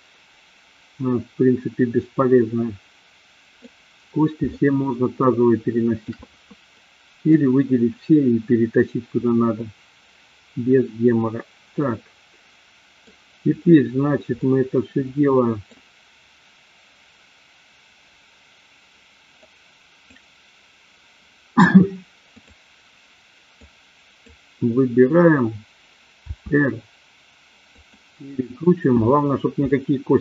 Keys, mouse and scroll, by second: 4.5-6.1 shift+middle drag, 6.8 middle click, 9.4-13.1 middle drag, 14.4-15.8 middle drag, 19.4-20.3 drag, 23.6-24.4 drag, 26.4 r, 29.6-30.2 shift+middle drag.